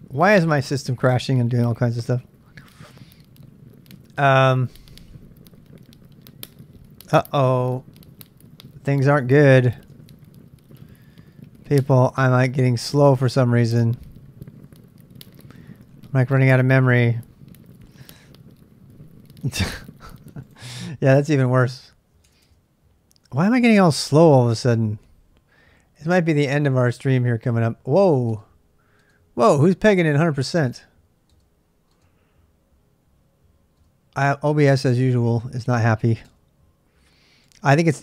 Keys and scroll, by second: 10.5-11.2 typing, 22.4 Tab, 23.5-26.1 super+Tab, 25.8-27.2 typing, 28.3 space, 29.0 space, 30.7 space, 31.3 space, 33.8 space, 34.9 space, 36.3 space, 37.4 space.